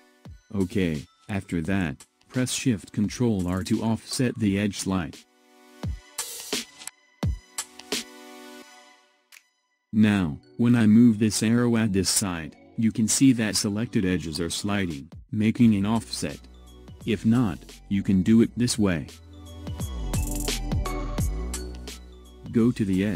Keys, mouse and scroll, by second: 4.5 ctrl+shift+r, 20.5 ctrl+z.